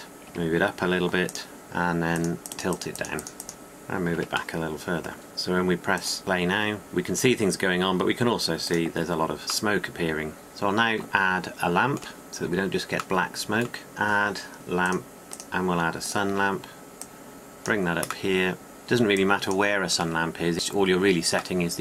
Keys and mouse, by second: 0.1 click, 0.8 g, 4.7 g, 5.2 g, 5.4-6.4 drag, 6.8-9.4 middle drag, 9.4-10.5 drag, 14.4-16.9 drag, 16.9 middle click, 18.4 drag, 18.7 r, 20.0-21.0 drag.